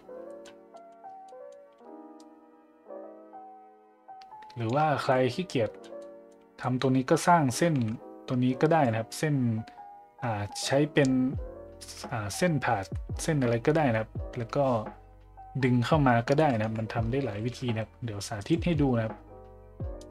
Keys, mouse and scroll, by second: 0.7 middle drag, 1.2 middle drag, 2.2-4.7 shift+drag, 5.1 middle drag, 5.4-5.8 middle drag, 6.0 middle drag, 6.6 middle drag, 16.3 middle click, 16.6 `, 17.3 shift+a.